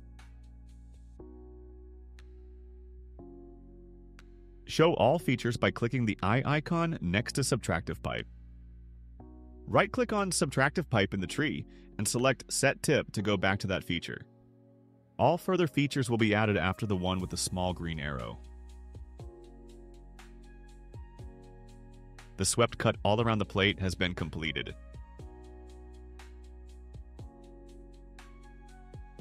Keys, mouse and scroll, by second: 1.8 click, 3.1-4.4 drag, 6.8 click, 7.9 click, 10.4 right click, 13.9 click, 14.9 click, 20.3 click, 22.4-29.2 drag.